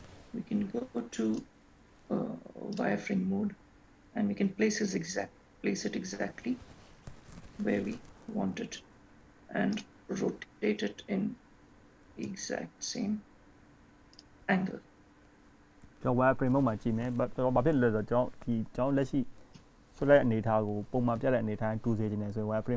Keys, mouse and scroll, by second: 1.6 click, 3.5 click, 6.1-6.5 scroll up 3, 7.7 g, 10.8 r, 17.2 g.